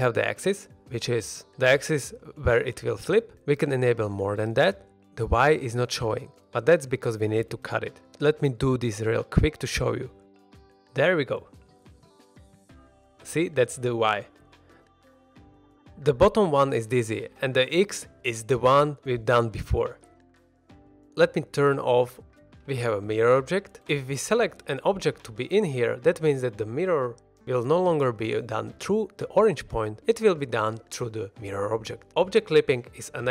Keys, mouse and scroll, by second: 3.9 scroll down 1, 4.1-4.5 middle drag, 5.0 click, 5.4 click, 5.8 middle click, 6.3 1, 6.4 middle click, 6.8 ctrl+r, 7.1 right click, 7.3 middle drag, 7.8 z, 8.2 alt+a, 8.5 b, 9.5 x, 10.3 z, 10.7 middle click, 11.1 scroll down 1, 11.3 middle click, 12.1 click, 12.5 g, 13.0 click, 13.2-13.7 middle drag, 14.6 click, 15.0 click, 15.7 click, 16.2 click, 16.5 click, 16.7 click, 17.4 click, 17.9 click, 18.4 middle drag, 19.9 click, 20.1 click, 20.7 middle drag, 20.9 ctrl+z, 20.9 click, 21.9 middle drag, 22.3 scroll up 1, 22.5-24.0 middle drag, 24.0 alt+a, 24.8-25.9 drag, 26.5 middle drag, 32.4 shift+middle click, 32.5 middle drag, 32.9-33.3 scroll up 2.